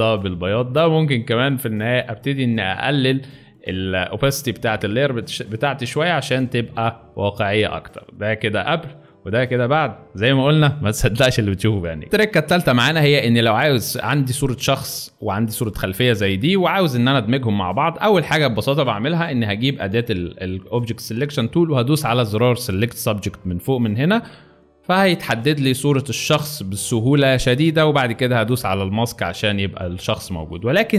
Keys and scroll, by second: 12.0 alt+space, 16.6 space, 17.3 alt+space, 30.0 alt+space.